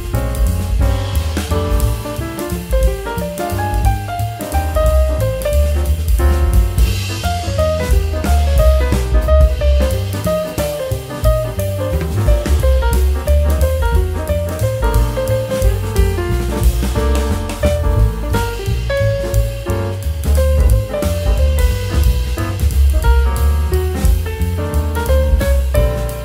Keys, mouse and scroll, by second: 0.3 ctrl+r, 1.9 middle click, 2.8 ctrl+r, 5.0-5.4 middle drag, 5.4 click, 5.5 click, 5.8 middle click, 6.7 ctrl+b, 8.6 middle click, 9.1 scroll up 3, 9.3 ctrl+z, 9.5-11.3 middle drag, 11.3 scroll down 2, 11.9-13.9 drag, 14.2 middle click, 14.9 click, 15.7-18.3 drag, 18.7 middle click, 19.3 scroll up 1, 19.3-21.5 middle drag, 21.5 Tab, 21.6 scroll down 1, 21.7 middle click, 22.1 Tab, 22.3 middle click, 22.6 click, 22.7 click, 23.2 s, 24.1 Tab, 24.2-26.1 middle drag, 26.1 Tab.